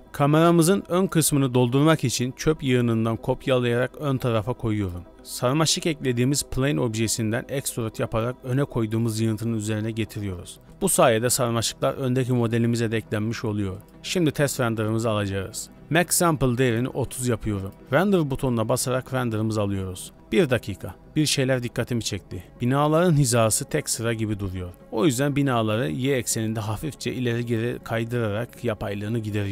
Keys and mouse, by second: 0.0 a, 1.0 Tab, 1.3 z, 2.3 KP_7, 3.2 2, 4.2 shift+middle click, 5.1 z, 7.8 shift+d, 11.4 KP_0, 12.2 z, 13.1 shift+middle click, 13.9-17.4 drag, 17.7-23.1 drag, 24.7 g, 25.9 g, 26.3 shift+click, 27.2 g, 28.2 KP_0, 28.6 z, 29.3 shift+middle drag.